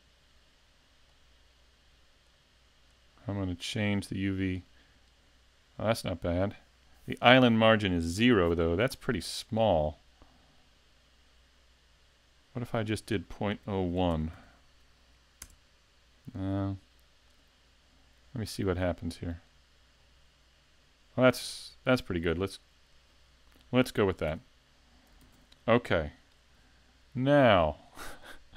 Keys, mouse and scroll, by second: 1.1 click, 10.6 click, 24.3 Tab, 25.2 s.